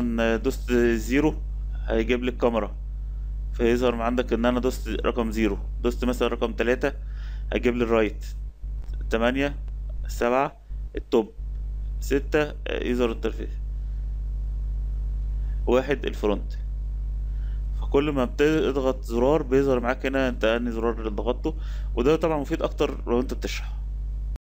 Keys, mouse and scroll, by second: 1.5 KP_0, 6.6 KP_3, 8.4 KP_8, 9.8 KP_7, 11.8 KP_6, 13.4 KP_4, 14.4 KP_1.